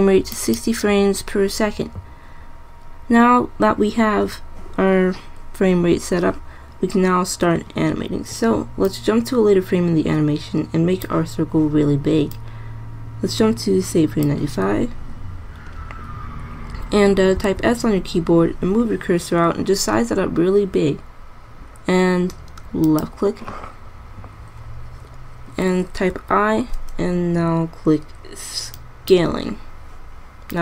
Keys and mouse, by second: 1.1 click, 9.0-10.7 drag, 17.6 s, 26.5 i.